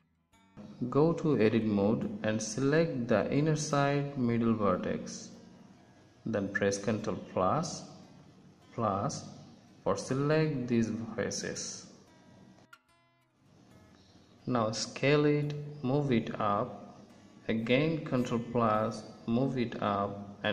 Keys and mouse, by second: 0.1 Tab, 5.6 KP_1, 6.7 middle click, 7.6 ctrl+KP_Add, 10.2 KP_1, 13.4 s, 16.5-18.4 drag, 19.1 ctrl+KP_Add.